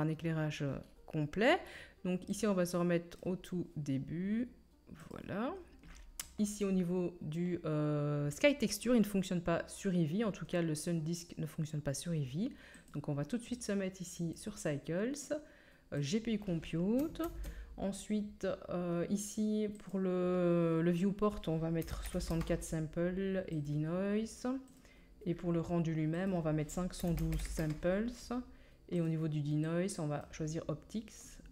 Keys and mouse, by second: 0.1-4.4 drag, 2.3-4.4 middle drag, 2.3-4.4 right drag, 12.9-13.6 drag, 13.6-24.7 middle drag, 17.2 ctrl+s, 24.7-26.1 drag, 26.1-31.5 middle drag.